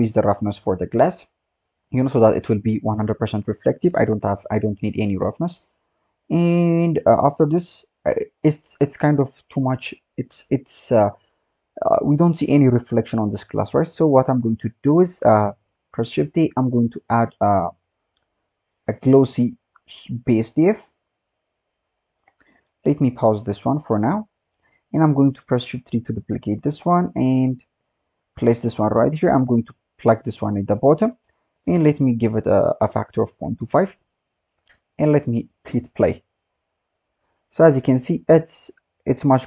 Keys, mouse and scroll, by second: 5.5-7.0 scroll down 6, 7.0-7.8 scroll down 6, 13.8 scroll down 1, 14.0-14.9 scroll up 9, 15.4 click, 15.6-16.0 scroll down 2, 16.0 shift+a, 23.4-23.8 drag, 24.3 scroll down 3, 24.5-25.1 scroll up 1, 25.1 click, 25.7 shift+d, 26.7-27.3 scroll up 5, 27.3-28.0 drag, 28.0 scroll down 4, 28.3-29.2 scroll up 10, 29.2-30.2 drag, 30.6 scroll down 2, 30.9-31.5 scroll up 5, 31.5-35.2 drag.